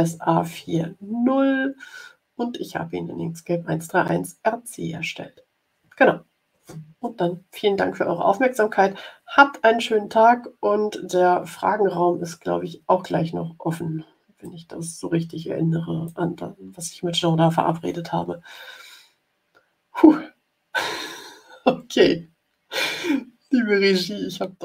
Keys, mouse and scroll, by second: 14.3-16.2 drag.